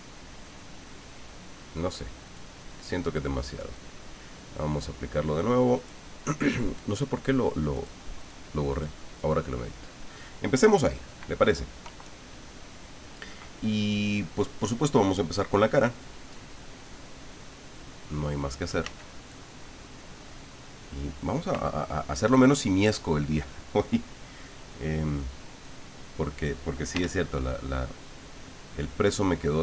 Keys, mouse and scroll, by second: 2.2 click, 2.6 click, 3.5 click, 5.7 click, 7.7 click, 8.2 click, 8.7 click, 9.2 click, 18.8 f, 21.0 click, 24.5 click, 25.6 click, 26.9 f, 28.6 click.